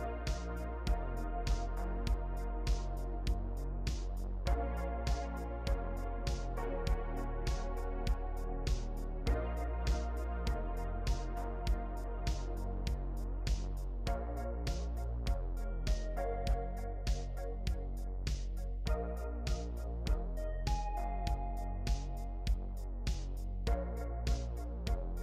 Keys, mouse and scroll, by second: 15.3 ctrl+e.